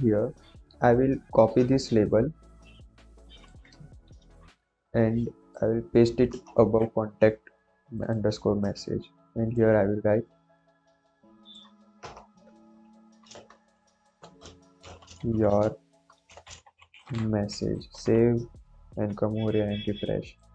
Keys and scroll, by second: 4.0 ctrl+c, 6.3 Return, 6.5 ctrl+v, 8.7 ctrl+s, 11.9 BackSpace, 14.5-17.6 typing.